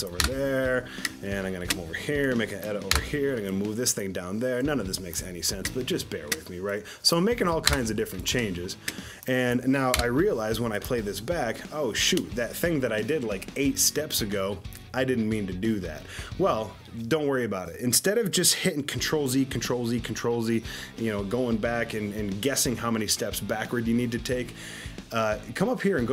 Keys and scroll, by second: 0.2 Delete, 3.0 Delete, 7.7 Delete, 9.9 Delete.